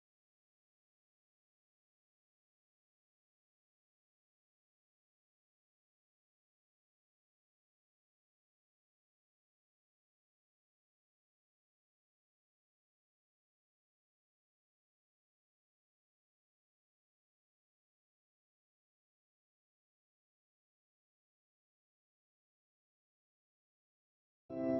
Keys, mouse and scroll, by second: 21.4 ctrl+s.